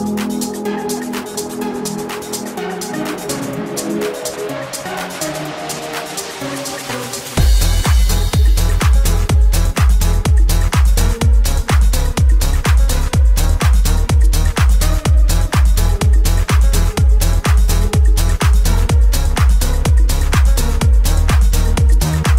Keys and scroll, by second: 18.0 7.